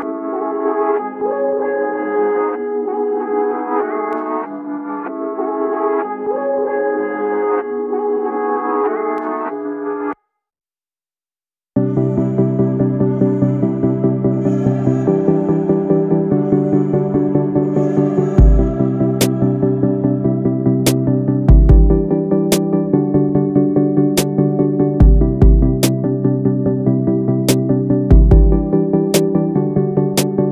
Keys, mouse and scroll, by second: 2.6 ctrl+scroll, 4.1 click, 4.8 ctrl+scroll, 5.7 click, 10.5-12.8 typing, 17.4-18.5 typing, 25.4 click.